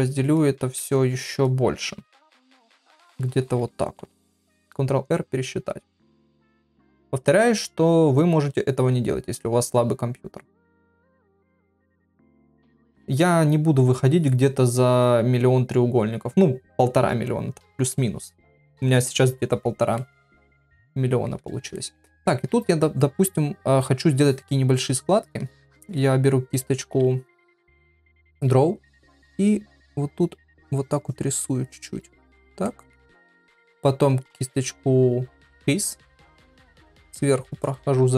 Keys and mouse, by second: 0.7 shift+r, 20.0 middle click, 20.9 ctrl+middle click, 21.7 shift+middle click, 26.6 [, 26.8 [, 29.7 click, 30.4 click, 31.0 click, 31.6 click, 32.7 ctrl+middle click, 36.5 ctrl+click, 37.0 ctrl+click, 37.5 ctrl+click.